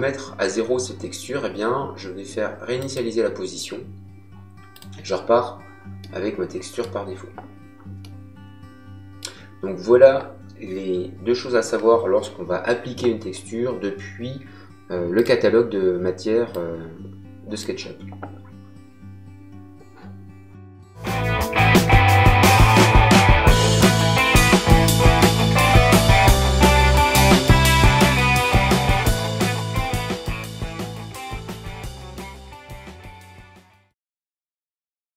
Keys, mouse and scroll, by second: 2.7 click, 4.7 click, 6.0 middle click, 7.9 middle click, 15.1 click.